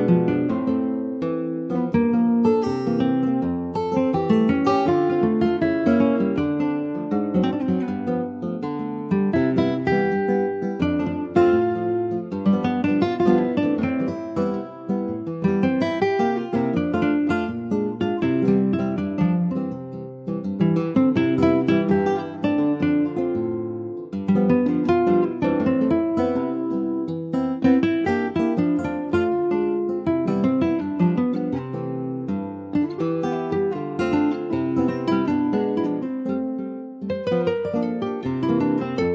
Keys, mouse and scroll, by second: 1.6 shift+middle click, 1.9-2.7 shift+scroll up 2, 2.7 click, 4.1 Left, 5.2 /, 5.7-6.9 middle drag, 6.9 click, 9.7-10.1 scroll up 3, 10.1 shift+middle click, 10.7 middle click, 10.8 scroll up 1, 11.0 Tab, 11.2 click, 11.9 Tab, 12.6 3, 12.8 click, 13.1 middle click, 13.3 scroll up 3, 13.7 shift+middle click, 14.1 scroll up 1, 14.3 middle click, 14.9 scroll down 2, 15.2-16.4 middle drag, 16.4 e, 18.8 3, 19.1 click, 19.9 click, 20.5 2, 20.6 click, 21.0 middle click, 21.6 ctrl+b, 23.2 Tab, 24.0 ctrl+a, 24.9 Tab, 25.8 ctrl+b, 28.3 Tab, 28.5 click, 28.7-29.0 scroll down 2, 29.0-30.1 middle drag, 30.1 click, 30.3 scroll down 2, 30.6 shift+middle click, 31.5 ctrl+s, 32.0 click, 32.3 scroll down 3, 32.5-33.8 shift+middle drag, 33.8 ctrl+s, 33.9 click, 34.2 middle click, 34.5-34.9 scroll up 2, 34.9 shift+middle click, 35.1 scroll up 1, 35.6-37.3 middle drag, 37.3 Tab, 38.6 ctrl+r.